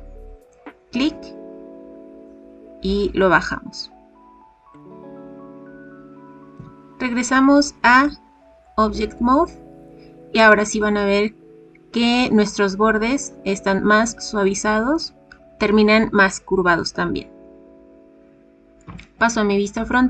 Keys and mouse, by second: 4.5 click, 6.5 Tab, 8.0-8.6 middle drag, 18.8 KP_1.